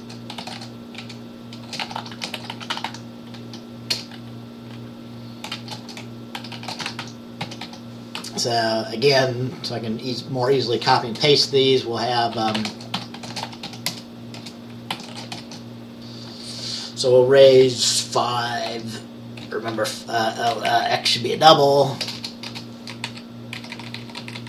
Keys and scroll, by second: 0.0-4.0 typing, 5.6-8.2 typing, 11.2 Return, 12.2-15.5 typing, 17.3-19.5 typing, 20.7 Up, 21.5 Up, 22.1-24.4 typing, 23.7 Left.